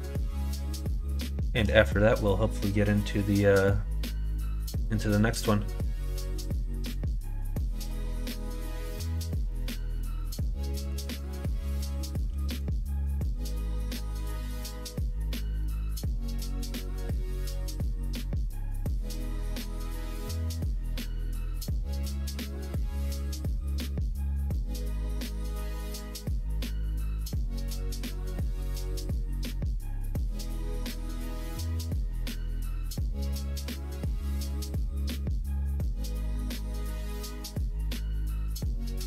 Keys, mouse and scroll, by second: 0.9 middle click, 1.3 shift+middle click, 1.8 middle click, 3.4 middle click, 4.4 middle click, 6.2 middle click, 8.0 alt+click, 8.9 2, 10.2 middle click, 11.3 middle click, 11.5-12.3 typing, 14.6 KP_1, 14.8 KP_3, 17.3 ctrl+right click, 19.6 alt+click, 20.4 g, 22.2 middle click, 22.4 right click, 23.0 click, 23.7 KP_1, 24.0 KP_3, 25.1 s, 26.9 ., 31.3 ctrl+f, 32.7 middle click, 33.5 middle click, 33.9 s, 35.0 s, 36.1 ctrl+z, 36.5 ctrl+r, 38.0 3, 38.5 click.